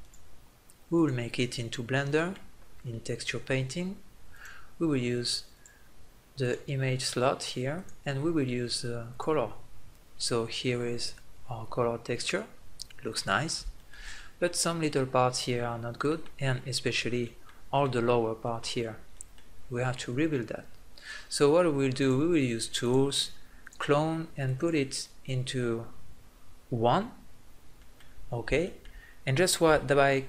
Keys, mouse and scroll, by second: 1.5-3.6 middle drag, 3.9 middle click, 4.1-9.3 drag, 9.3 middle click, 11.4-13.2 middle drag, 15.8-17.6 middle drag, 20.8 middle click, 21.8-27.6 drag, 27.8-29.4 middle drag.